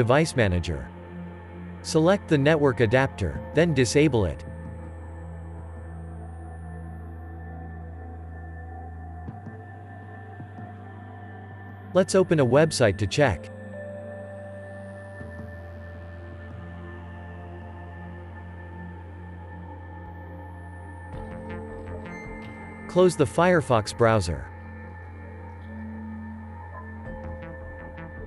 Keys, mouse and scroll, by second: 1.2 d, 15.5 click, 15.6 double click, 19.0 click, 25.1 click.